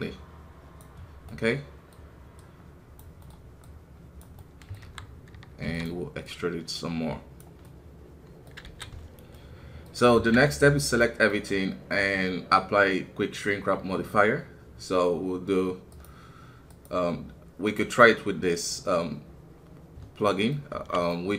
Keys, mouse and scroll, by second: 1.0 scroll down 1, 1.2-4.8 middle drag, 4.8 KP_1, 5.6 e, 6.2-8.6 drag, 8.6 alt+a, 9.3 middle click, 10.1 a, 11.0-15.9 middle drag, 15.9-20.6 drag, 21.1-21.3 middle drag.